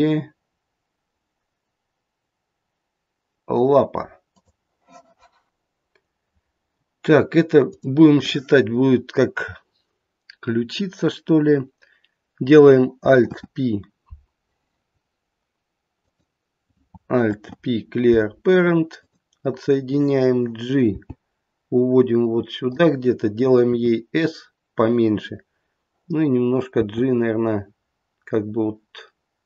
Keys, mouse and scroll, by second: 7.6 click, 13.2 p, 15.9 click, 17.2 alt+p, 20.8 g, 23.6 s.